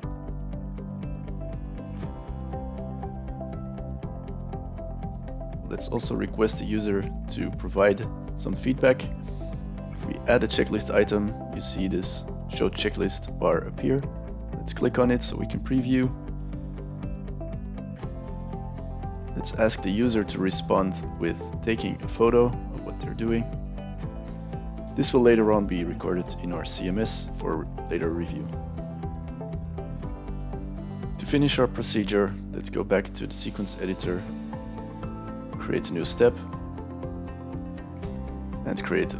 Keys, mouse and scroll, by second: 1.2 click, 2.4 click, 5.7-7.1 drag, 9.8 click, 14.1 click, 17.1 click, 17.1 right click, 18.4 click, 20.2 click, 23.5 click, 27.4 click, 29.4 f, 29.5 space, 33.1 click, 34.6 right click, 35.9 click, 36.9 space, 37.2 e, 37.5 click.